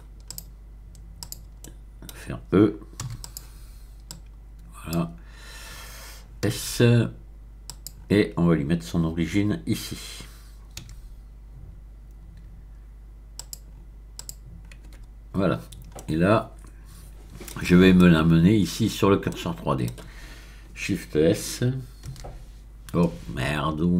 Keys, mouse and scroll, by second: 0.3 click, 1.2 click, 3.0 e, 3.2 click, 4.1-5.2 drag, 6.5 s, 7.6 click, 10.8 q, 13.3 click, 14.1 click, 14.9 Tab, 15.5-15.9 scroll down 1, 15.9-18.5 middle drag, 19.3-20.2 scroll up 1, 22.2 ctrl+s.